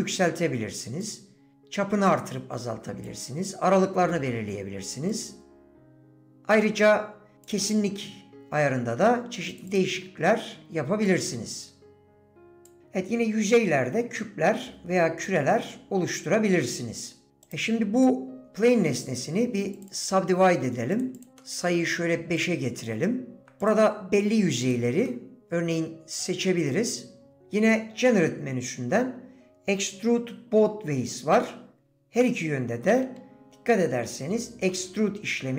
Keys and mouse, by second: 1.1-2.2 drag, 3.1 click, 5.2-6.5 drag, 7.6 click, 9.5 click, 9.7 click, 11.2-12.7 drag, 17.5 right click, 18.0 click, 19.9 click, 21.1 click, 21.4 middle click, 23.6 click, 24.6 shift+click, 25.1 middle click, 32.3 middle click.